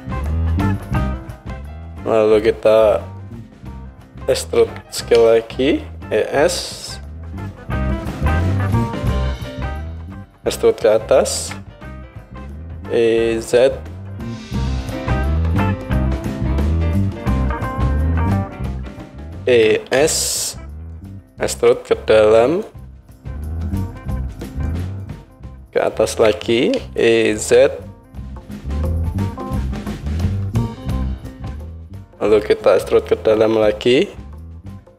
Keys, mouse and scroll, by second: 4.6 e, 11.4 e, 17.8-22.8 drag, 19.5 e, 22.8-23.8 middle drag, 23.8-29.4 drag, 26.1 e, 29.4-31.3 middle drag, 31.3-34.9 drag.